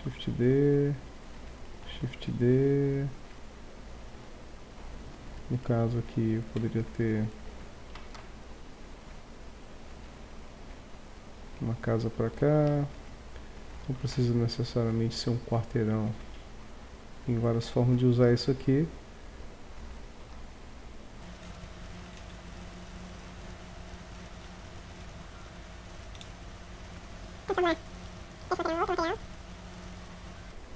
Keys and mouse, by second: 2.0 shift+d, 3.5 middle click, 3.7-4.3 drag, 4.6 click, 5.2 click, 7.8 r, 8.4 click, 9.9 click, 12.6 shift+d, 13.6-14.0 drag, 14.0 r, 18.2 shift+d, 19.7-20.2 drag, 20.2 r, 21.5 middle click, 22.1 r, 22.7-23.2 drag, 23.2 right click, 23.4 shift+d, 24.5 shift+d, 25.0 s, 25.6 d, 26.1 right click, 26.2 s, 26.4 right click, 28.8-30.2 middle drag.